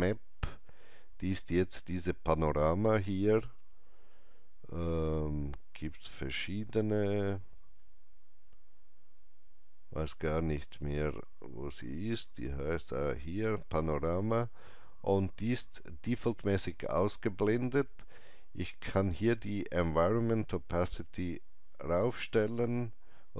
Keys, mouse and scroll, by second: 1.6 click, 1.6 shift+right click, 5.8 click, 5.8 scroll down 1, 7.2-9.5 scroll up 2, 13.2 click, 13.2-15.4 scroll up 1, 20.5-23.3 drag, 20.5 scroll up 1.